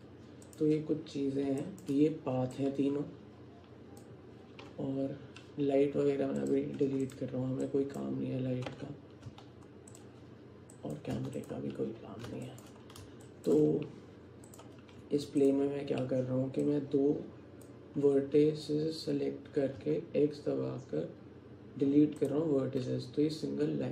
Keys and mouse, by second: 1.7 alt+shift+click, 2.6-4.0 drag, 7.1 click, 7.7 click, 9.3 x, 11.2 x, 12.5 alt+shift+click, 13.3 alt+shift+click, 14.5 click, 15.1 Tab, 16.7-17.7 drag, 19.8 x.